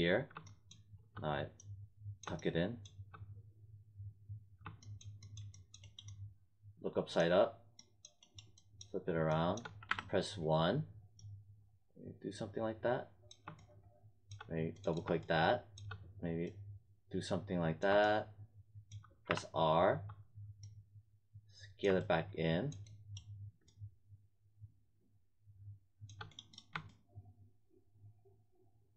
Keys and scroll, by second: 9.8 w, 19.2 r.